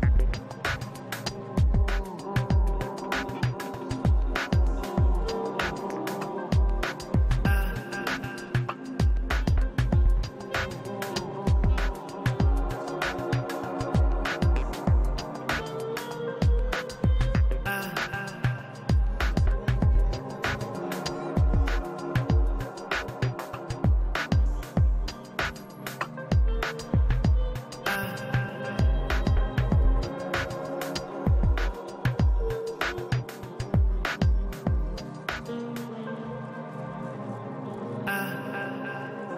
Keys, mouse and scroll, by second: 0.1-1.4 middle drag, 0.9 click, 1.6 middle click, 2.0 click, 2.6 middle click, 2.9 click, 3.8 f, 4.0-5.1 middle drag, 4.6 click, 5.5-6.7 middle drag, 6.7 click, 7.5 middle click, 7.8 click, 8.7 click, 9.4-11.7 middle drag, 11.7 click, 12.1 f, 12.5 middle click, 12.7-14.2 drag, 13.4 ctrl+z, 14.2-15.4 middle drag, 14.9 click, 15.5-17.8 middle drag, 15.8-17.3 drag, 17.4-18.7 drag, 18.1-20.0 middle drag, 19.0 i, 19.1 f, 19.4 f, 19.8-24.9 drag, 22.2 middle click, 24.2-26.5 middle drag, 25.4 shift+c, 25.5 f, 25.9-29.1 drag, 27.0 i, 27.3 f, 28.5-29.7 middle drag, 29.7 shift+c, 29.8 f, 30.8-37.2 drag, 31.8-34.5 middle drag, 35.8 i, 36.0 f, 36.7 middle click, 37.1-39.0 middle drag, 37.7 shift+c, 37.8 f, 38.5-39.3 drag.